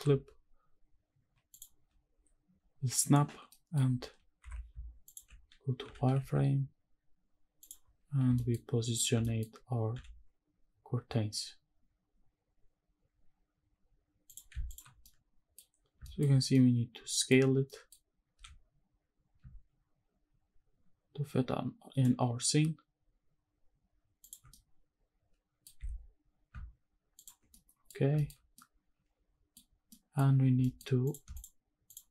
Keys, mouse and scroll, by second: 1.5 ctrl+click, 3.5 middle drag, 4.4 KP_7, 5.3 z, 5.8 g, 6.3 shift+z, 7.6 click, 7.8-8.3 scroll up 3, 8.3 shift+middle drag, 8.7-9.1 scroll up 1, 9.3 shift+middle click, 9.9 g, 14.3 click, 14.5 z, 15.0-15.5 middle drag, 15.8 scroll down 1, 16.0 shift+middle drag, 16.4 scroll down 1, 16.5 middle click, 17.7 middle click, 18.3 s, 24.2 shift+click, 24.5-25.7 middle drag, 25.8 s, 27.2 shift+click, 27.4 scroll down 1, 27.5-27.9 middle drag, 28.2 shift+middle click, 28.5-29.5 middle drag, 29.7 scroll up 1, 29.9 middle drag, 30.6 middle drag, 31.0 click, 31.3 shift+click, 31.9 shift+click.